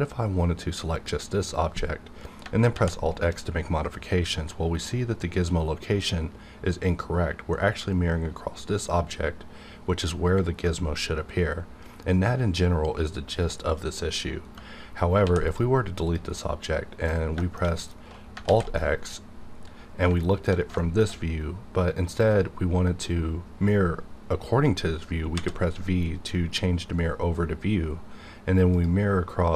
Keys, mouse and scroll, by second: 1.2 click, 1.3 click, 2.7 alt+x, 6.4 x, 14.4 right click, 15.2 x, 15.5 click, 16.3 click, 16.3 middle click, 16.4 scroll down 1, 17.4 shift+middle click, 18.1 scroll up 1, 18.4 alt+x, 18.7-20.4 middle drag, 20.4 alt+scroll down 1, 20.8 shift+middle click, 21.6 shift+middle click, 25.3 v, 28.7 click.